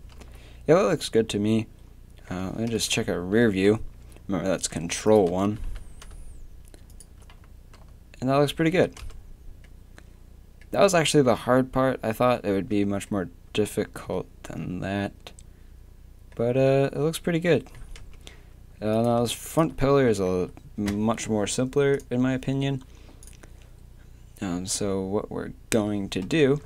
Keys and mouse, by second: 0.2 z, 2.7 ctrl+KP_1, 4.7 Tab, 5.5 g, 7.7 z, 8.7 z, 9.0 Tab, 12.5 Tab, 13.9 Tab, 16.2-17.3 middle drag, 18.0 Tab, 18.9-26.2 right drag, 26.2 middle click, 26.2 KP_3.